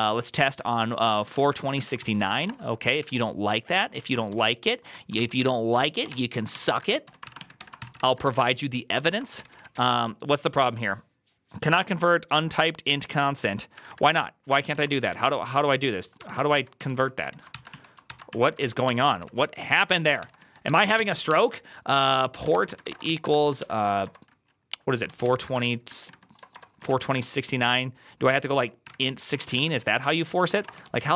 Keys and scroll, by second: 0.0-10.2 typing, 5.0 ctrl+c, 7.8 ctrl+c, 8.9 ctrl+c, 14.4-25.9 typing, 19.0 ctrl+c.